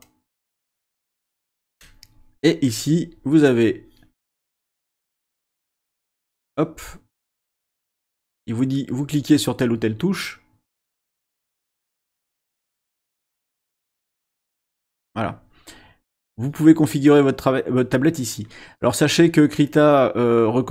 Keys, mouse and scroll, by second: 0.0 click, 6.9 middle click, 7.9 middle click, 8.7 middle click, 10.7-11.7 drag, 12.1-12.7 drag, 12.9-13.9 drag, 14.7 click, 16.1 click.